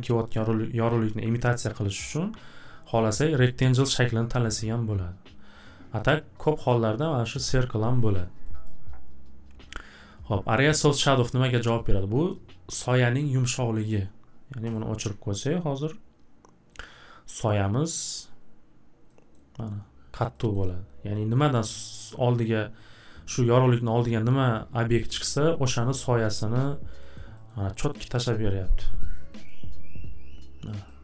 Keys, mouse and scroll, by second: 6.1 click, 8.6 click, 14.7 click, 18.2-18.9 drag, 19.3 scroll, 20.0-20.6 middle drag, 20.6 scroll, 21.6 scroll, 27.1 middle click, 27.5 middle click, 27.8-28.3 scroll, 30.9 middle click.